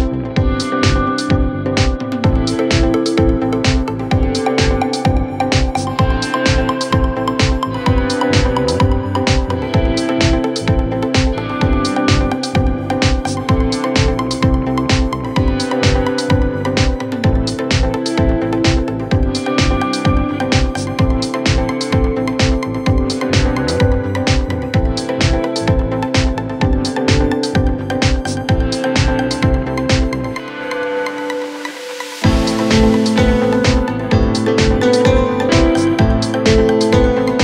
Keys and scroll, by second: 0.1 Return, 3.2 a, 3.3 Return, 9.8 c.